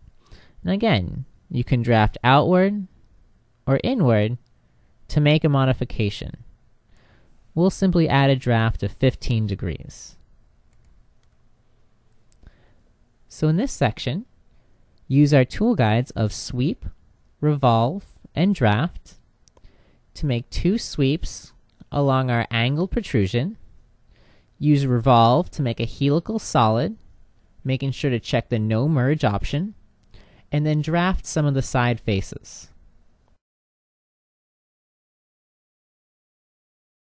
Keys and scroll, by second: 10.5 h.